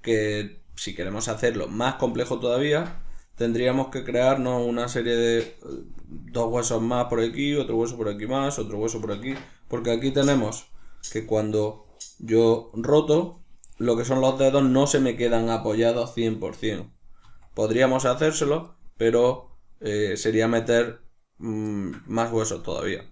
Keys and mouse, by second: 4.0 right click, 4.4-10.3 shift+middle drag, 9.8 r, 10.6 right click, 12.2 r, 13.6 right click, 17.1 r, 17.8 right click, 19.0 r, 20.3 right click, 21.6-23.1 shift+middle drag.